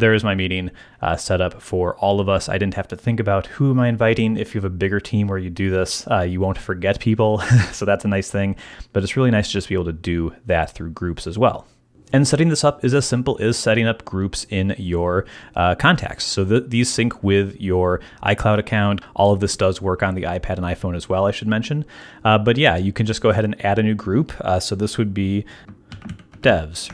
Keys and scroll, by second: 25.7-26.9 typing.